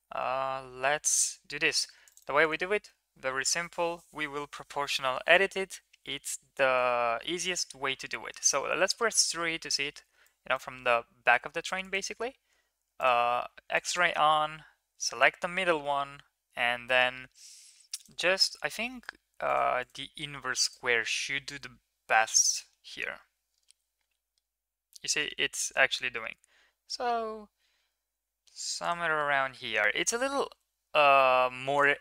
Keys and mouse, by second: 0.6 ctrl+r, 7.6 KP_3, 9.1 shift+middle click, 10.4 click, 11.8 click, 13.0 click, 13.9 click, 18.1-19.1 drag, 19.4 click, 19.9-20.9 drag, 22.1 g, 29.5 Tab, 30.5 g.